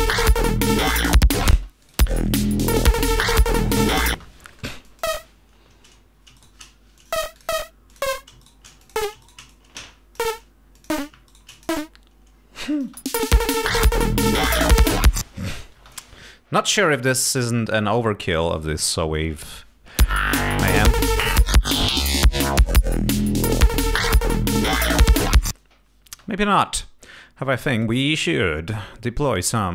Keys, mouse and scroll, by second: 1.7 space, 2.0 click, 4.3 space, 5.0 click, 6.5 shift+right click, 7.1 shift+click, 7.5 shift+click, 8.0 shift+click, 8.5 shift+right click, 8.9 shift+click, 9.3 shift+right click, 9.6 shift+click, 10.8 click, 11.4 shift+right click, 11.6 shift+click, 12.8 click, 13.0 space, 15.9 space, 16.2 ctrl+scroll down 2, 17.7 click, 20.1 space, 21.1 ctrl+scroll up 2, 22.9 click, 26.2 space, 27.6 click, 28.3 right click.